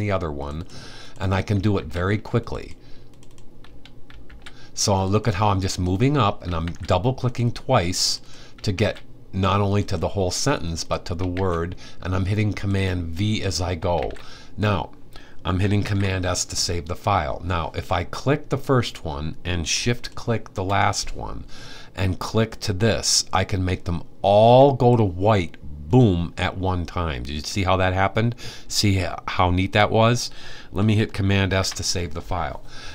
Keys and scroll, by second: 1.4 super+v, 3.9 super+v, 6.3 super+v, 8.4 super+v, 10.9 super+v, 13.7 super+v, 15.4 super+s, 31.1 super+s.